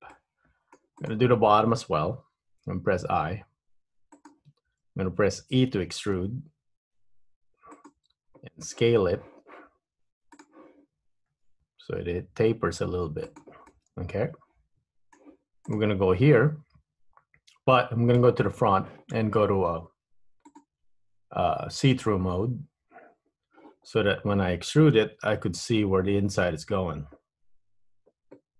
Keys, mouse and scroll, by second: 0.2 middle click, 1.0 click, 3.0 i, 6.1 e, 10.4 click, 11.4 s, 13.8 middle click, 15.8 click, 18.3 KP_1, 20.5 click, 25.2 e.